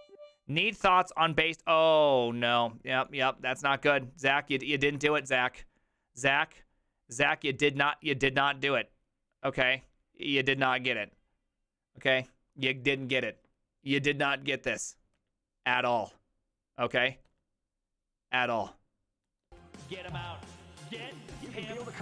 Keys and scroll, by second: 5.1 alt+f.